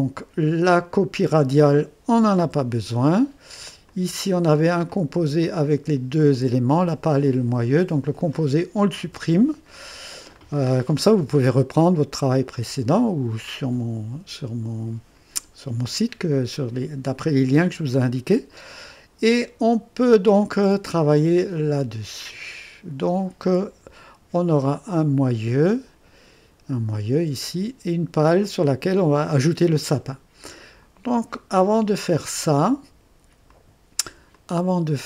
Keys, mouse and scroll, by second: 0.7 click, 2.4 Delete, 3.8 click, 4.9 click, 5.2 typing, 6.2 click, 8.3 click, 9.1 Delete, 9.1 typing, 10.3-11.4 drag, 11.8-12.4 right drag, 12.6-16.5 drag, 17.9-19.0 drag, 20.8 click, 21.6 click, 23.5 click, 23.9 typing, 24.9 click, 27.2-27.9 typing, 33.5 click, 34.3-35.0 drag.